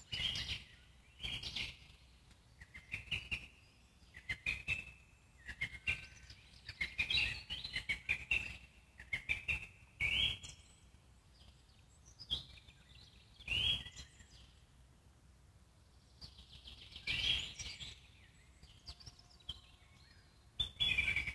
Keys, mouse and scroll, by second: 0.4 click, 0.8 click, 1.1 Tab, 2.1 alt+middle click, 2.9 click, 4.0 z, 5.2 click, 14.1 alt+middle click, 14.7 click, 15.1-15.6 scroll up 2, 15.6 click, 16.5 g, 17.9-19.1 alt+middle drag, 19.1 Tab, 21.0-21.3 drag.